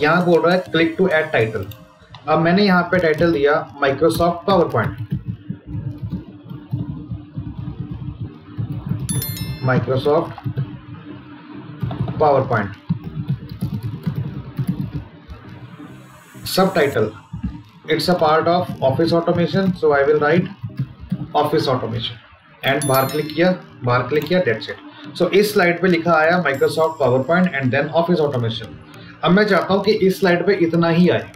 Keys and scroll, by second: 5.9 space, 9.3 space, 18.8 space, 19.0 space.